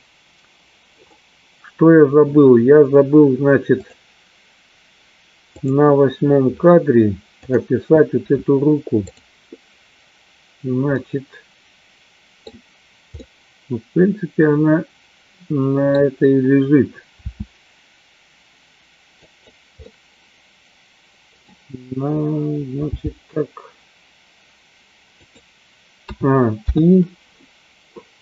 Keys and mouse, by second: 4.3 click, 6.1 click, 7.5 click, 9.2 click, 11.2-12.6 middle drag, 13.5-16.1 middle drag, 17.6 r, 19.8-21.6 middle drag, 23.0 g, 27.0 i.